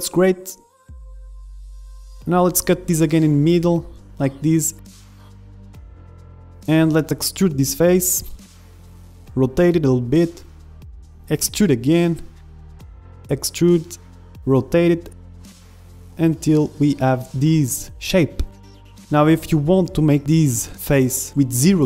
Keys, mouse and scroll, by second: 0.2 Tab, 2.3 Tab, 2.3-4.1 middle drag, 3.3 ctrl+r, 4.9 ctrl+Tab, 5.3 click, 5.4 a, 5.5 b, 6.5 ctrl+Tab, 7.4 middle click, 7.8 right click, 7.8 e, 8.9 r, 10.1 click, 10.8 e, 12.9 middle click, 13.1 e, 13.6 r, 15.1-16.3 drag, 16.3 middle click, 16.5 e, 17.2 click, 17.2-18.6 right drag, 17.7 a, 17.7 b, 17.8 click, 19.8 r, 20.5-21.8 middle drag.